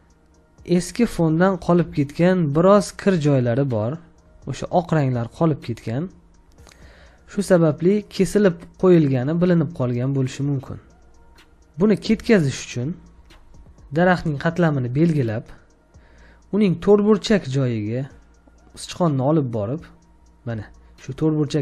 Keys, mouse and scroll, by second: 1.8 space, 2.0 ctrl+click, 5.3 ctrl+click, 6.4 ctrl+click, 7.6 ctrl+click, 8.7 ctrl+click, 11.2 space, 12.1 space, 12.3 ctrl+click, 13.5 ctrl+click.